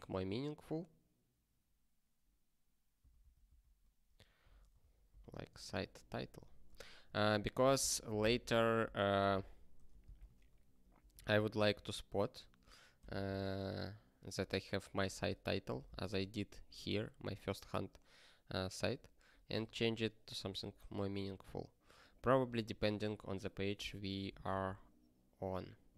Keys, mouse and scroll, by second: 3.0 alt+d, 3.2 alt+d, 4.4 ctrl+d, 4.8 ctrl+e, 5.1 ctrl+b, 5.5-6.9 typing, 7.1 ctrl+s, 8.6 alt+b, 8.7 alt+b, 9.2 shift+m, 9.7 y, 9.9 space, 10.2 ctrl+s, 10.8 ctrl+p, 11.2 ctrl+n, 11.3 ctrl+a, 11.6 ctrl+space, 11.7 ctrl+e, 13.0 ctrl+g, 15.1 ctrl+p, 15.6 ctrl+g, 19.5 ctrl+g, 20.8 click.